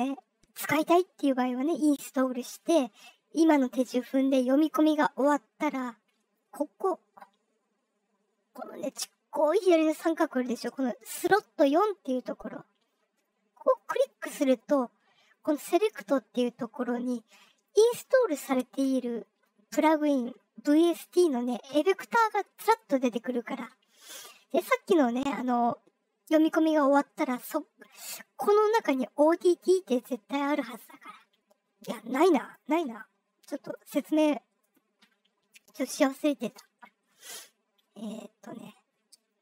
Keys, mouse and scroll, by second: 13.7 click, 32.4 click, 33.6 click, 34.6 click, 35.8 middle drag, 35.8-38.2 scroll down 10, 38.8-39.2 scroll down 2.